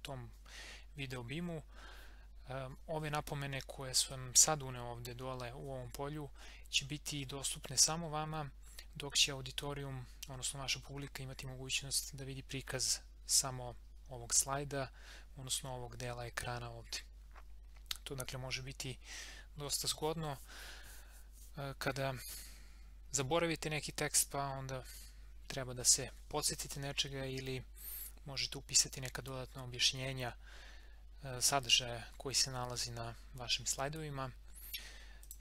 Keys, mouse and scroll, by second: 4.1-7.5 drag, 12.0 click, 35.2 click.